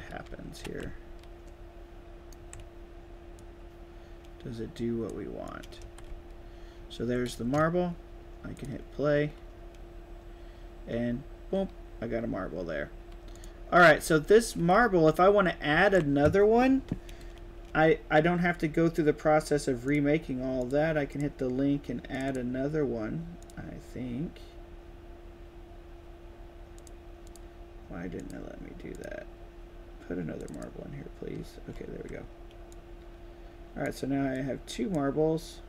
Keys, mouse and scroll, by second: 0.2 w, 0.7 a, 3.3-5.0 drag, 5.4 right click, 5.5-7.3 typing, 5.9 shift+right click, 6.3-7.5 shift+right drag, 8.5 click, 13.2 click, 13.7-15.7 typing, 13.8-15.9 right drag, 19.8 drag, 20.5 click, 21.0 click, 22.1 click, 23.3 click, 26.7 click, 27.2 click, 28.1 click, 28.9 click, 30.3 click, 30.4 click, 31.6 s, 32.6-33.7 drag, 34.2-34.9 drag.